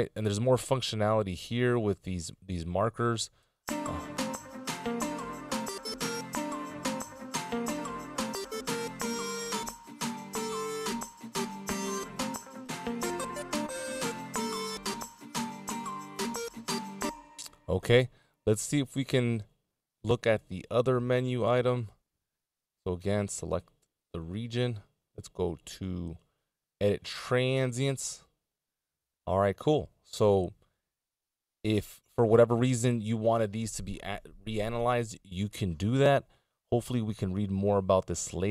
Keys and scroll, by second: 3.4 space, 16.8 space, 20.8 super+z.